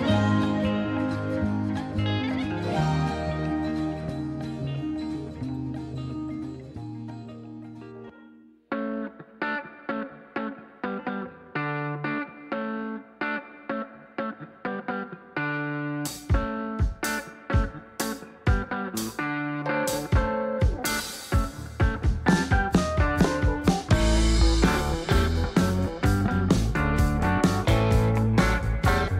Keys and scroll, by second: 1.3 Delete, 5.1 Delete, 7.1 Delete, 11.9 Left, 28.0 ctrl+a, 29.0-29.1 typing.